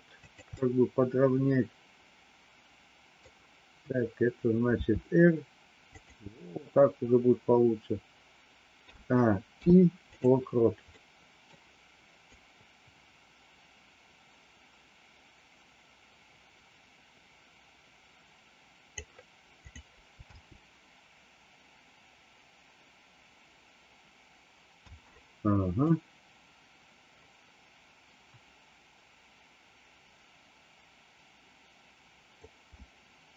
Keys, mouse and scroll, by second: 0.6-3.2 middle drag, 4.8 r, 8.8 a, 9.6 i, 10.9 middle click, 12.2-18.9 drag, 19.5 click, 20.2 space, 24.8 space, 25.8-32.4 drag.